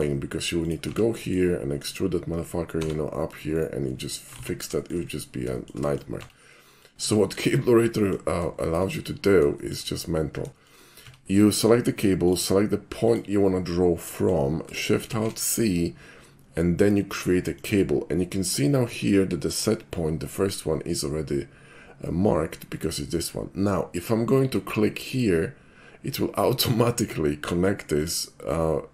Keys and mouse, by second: 0.6 click, 0.9 Tab, 1.2 middle click, 1.9 click, 2.7 e, 3.5 right click, 3.9 middle click, 4.3 ctrl+z, 4.8 shift+middle click, 5.2 shift+middle click, 5.5 shift+middle click, 5.8 shift+middle click, 6.2 Tab, 6.7 middle click, 7.2 shift+middle drag, 7.9 shift+middle drag, 8.6 shift+middle drag, 9.6 shift+middle click, 10.6 shift+middle click, 11.0 Tab, 12.3 click, 13.1 click, 14.2 middle click, 15.1 alt+shift+c, 17.6 click, 25.1 click, 26.5-27.1 middle drag, 28.0 click.